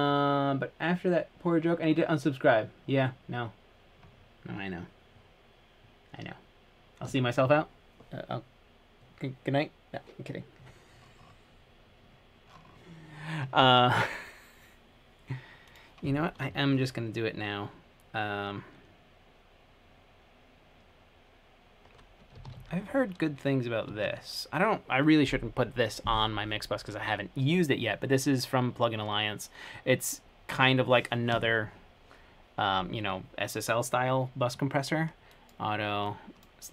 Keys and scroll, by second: 22.3-23.3 typing, 24.1 Return.